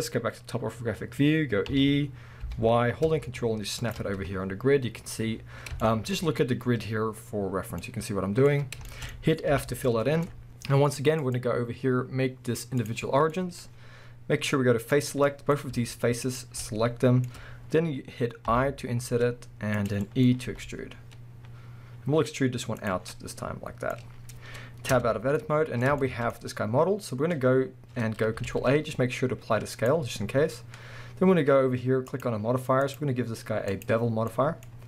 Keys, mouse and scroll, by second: 1.7 e, 3.9 ctrl+click, 4.2 scroll down 1, 5.8-11.2 shift+middle drag, 7.6 scroll down 1, 8.5 scroll up 1, 9.5 f, 9.8 scroll up 1, 11.2-13.4 drag, 13.4-14.9 middle drag, 14.9 click, 15.3-16.2 middle drag, 16.2 shift+click, 16.6-18.6 middle drag, 17.4-18.5 scroll up 2, 19.9 click, 20.0-20.5 middle drag, 20.5 e, 22.9 click, 23.1 scroll down 2, 23.1-25.0 middle drag, 25.0 Tab, 25.2-32.1 middle drag, 25.2 scroll down 2, 26.4-28.5 scroll up 2, 28.5 ctrl+a, 32.1 click, 32.8-34.3 drag, 34.3-34.8 middle drag, 34.7-34.8 scroll up 2.